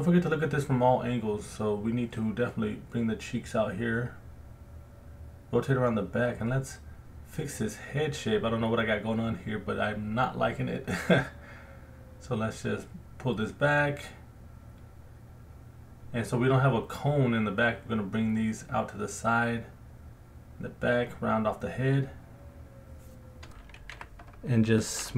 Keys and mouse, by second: 1.1 alt+middle click, 1.6 alt+middle click, 2.0 click, 2.5 f, 3.1 click, 4.3 middle click, 4.4 alt+click, 5.0 alt+shift+click, 5.3 alt+click, 5.3 middle click, 6.7 middle click, 6.9 alt+click, 7.8-8.9 drag, 9.9 g, 10.0 f, 10.4 click, 10.8 click, 11.5 click, 12.1 middle click, 12.4-14.2 drag, 14.2 alt+middle click, 14.5 click, 15.1 alt+middle click, 15.8 middle click, 16.0 alt+click, 16.7 click, 17.1 middle click, 17.1 alt+click, 17.4 middle click, 17.4 alt+click, 17.9 f, 20.2 click, 21.0 middle click, 21.1 alt+click, 21.7 ctrl+alt+click, 22.0 ctrl+alt+click, 22.2 alt+middle click, 22.6 alt+click, 23.2 ctrl+alt+click, 23.9 f, 24.7 alt+middle click.